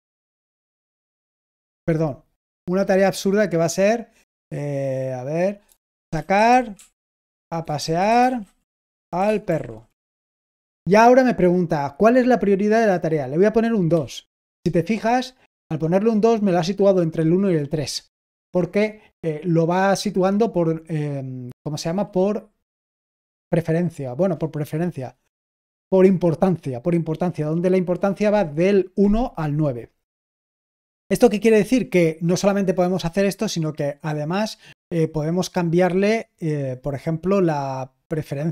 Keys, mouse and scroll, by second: 1.3 BackSpace, 5.6-10.3 typing.